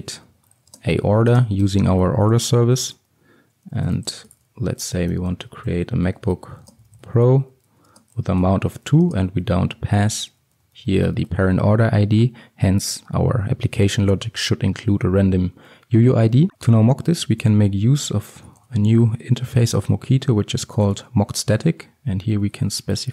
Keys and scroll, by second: 3.0 Return, 10.1 Return, 16.5 ctrl+x, 21.0 Return.